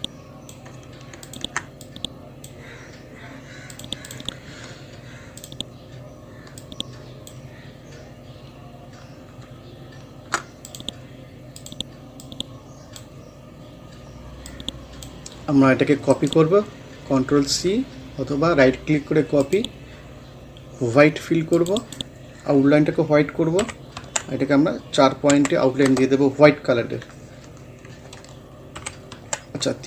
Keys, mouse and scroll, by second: 7.6 scroll down 1, 8.6 scroll up 1, 9.4-10.5 shift+scroll up 1, 10.5 scroll up 1, 10.7-16.1 drag, 16.1 right click, 19.4 click, 21.8 right click, 23.6 F12, 24.0 Tab, 25.3 4, 25.9 Return, 28.8 F12, 29.2 Tab.